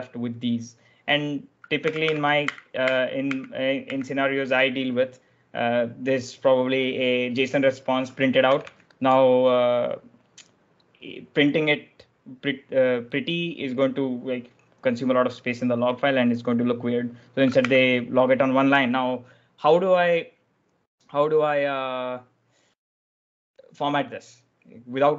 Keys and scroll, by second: 0.9-3.7 typing, 8.4 l, 8.6 l, 11.5 ॥, 17.1-18.0 typing.